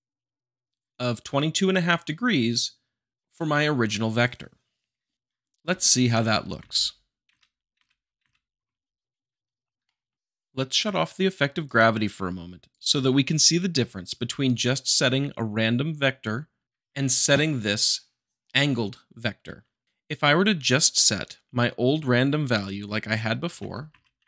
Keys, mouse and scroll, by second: 5.1 middle click, 6.6 Left, 7.3 Right, 9.8 shift+middle click, 21.0-22.0 drag, 23.6 shift+BackSpace, 23.9 Right.